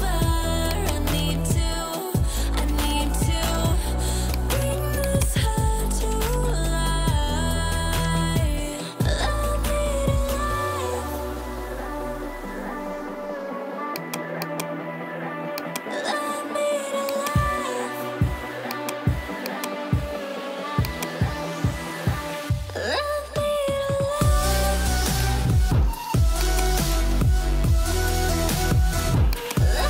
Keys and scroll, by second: 23.5 ctrl+j, 24.8 ctrl+t.